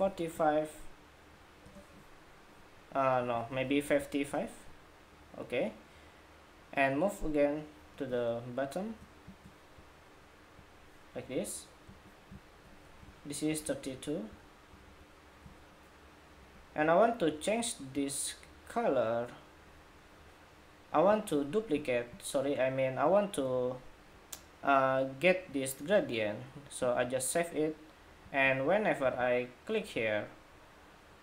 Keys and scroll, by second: 12.9 alt+shift+Up, 13.5 alt+Up, 14.7 alt+Up.